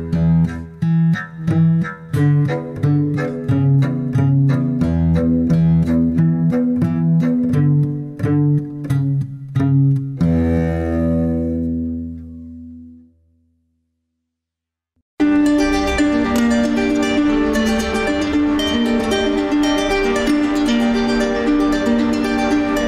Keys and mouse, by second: 7.7 drag, 13.4-13.8 shift+middle drag, 14.4 click, 19.9 click.